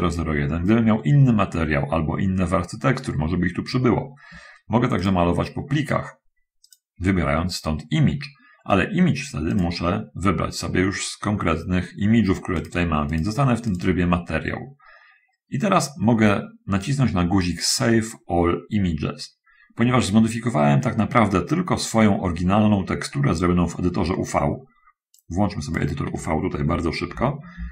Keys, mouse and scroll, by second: 5.3 click, 6.9 click, 9.8 click, 12.8 click, 14.0 click, 25.2 click, 27.4 shift+F10.